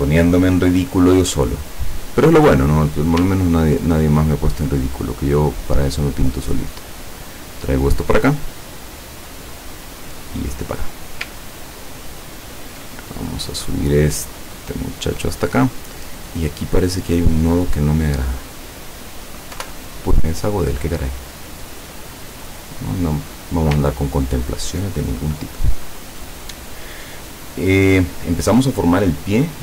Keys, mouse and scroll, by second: 2.0 click, 2.9 click, 3.5-4.1 ctrl+scroll up 4, 5.1-7.6 drag, 8.1 click, 8.7-11.3 drag, 11.6-11.9 ctrl+scroll down 2, 12.4 ctrl+scroll up 2, 13.4 click, 14.1-15.7 drag, 16.0 click, 17.0 click, 19.6 Delete, 21.5-23.5 drag, 24.0-24.5 ctrl+scroll down 2.